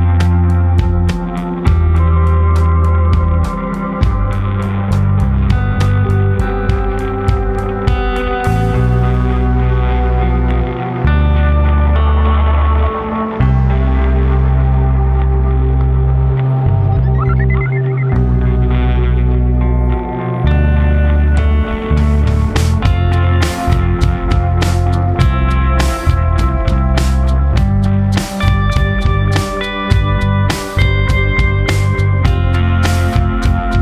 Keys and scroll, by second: 8.8 ctrl+t, 32.0 ctrl+u.